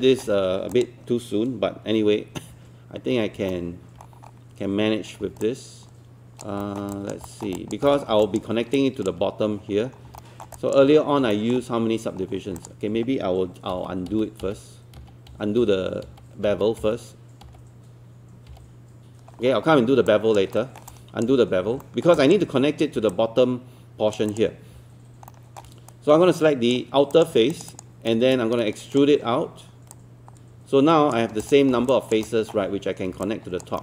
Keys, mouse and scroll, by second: 0.7 click, 2.5 1, 3.1 scroll up 1, 3.5 alt+middle click, 4.0 scroll up 1, 5.1 scroll down 1, 5.4 alt+click, 6.6 alt+middle click, 7.0 alt+click, 7.2 alt+middle click, 7.6 alt+click, 7.9 alt+middle click, 8.0 scroll down 1, 8.2 alt+click, 8.8 alt+click, 9.8 scroll up 1, 10.2 alt+middle click, 10.6 alt+click, 10.9-11.2 scroll up 1, 11.3 alt+middle click, 12.2-12.6 scroll down 1, 12.6 click, 13.7-19.0 typing, 19.4-19.9 scroll down 1, 20.1 alt+click, 20.6 alt+middle click, 20.9 alt+click, 21.6 scroll up 1, 21.8 alt+middle click, 22.2 alt+click, 23.1 alt+click, 25.3 alt+middle click, 26.4 right click, 27.2 click, 27.5 shift+click, 28.1-29.9 shift+right drag, 30.0 click, 31.9 alt+click, 32.2 alt+middle click, 33.2 alt+click.